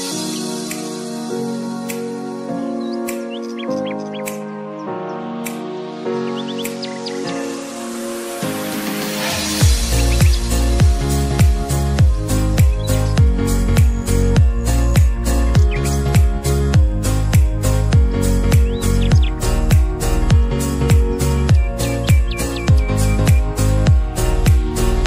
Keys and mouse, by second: 0.2 ctrl+u, 2.0-9.7 drag, 9.7 Down, 12.4 Right, 15.9 alt+click, 17.0 ctrl+z, 18.8 =, 19.3 ctrl+-, 23.7 click.